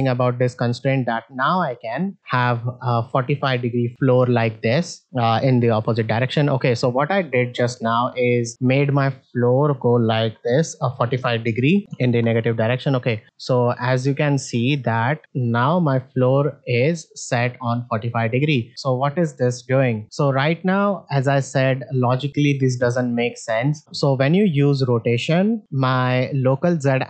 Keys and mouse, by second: 0.5 shift+middle drag, 2.2 r, 6.7 middle drag, 7.3 ctrl+Tab, 8.1 click, 9.6 r, 13.0 ctrl+Tab, 13.2 alt+z, 13.8 click, 14.3 ctrl+Tab, 14.6 click, 15.0 middle click, 15.9-18.3 drag, 22.8 middle click, 25.6 middle click.